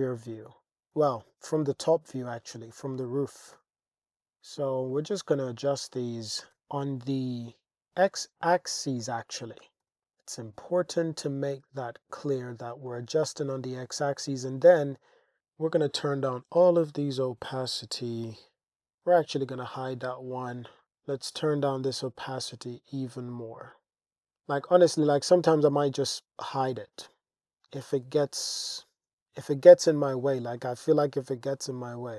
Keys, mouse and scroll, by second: 0.9 g, 1.2 x, 2.3 click, 2.7 click, 4.9 click, 5.3 click, 6.5 g, 6.8 x, 8.6 click, 9.0 click, 9.8 g, 9.9 x, 11.2 Tab, 14.9 Tab, 15.8 click, 17.1 click, 18.6 super+z, 18.6 h, 19.1 h, 20.4 shift+drag, 20.8-24.2 drag, 24.7 click, 25.5 h, 28.6 click, 29.5 click, 30.1 click.